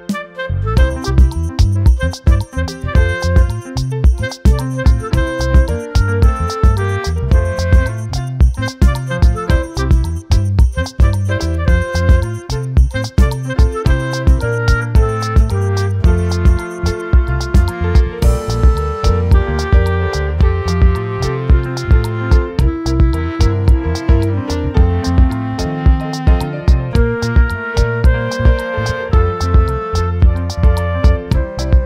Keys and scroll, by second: 1.7 ctrl+t, 24.1 ctrl+t.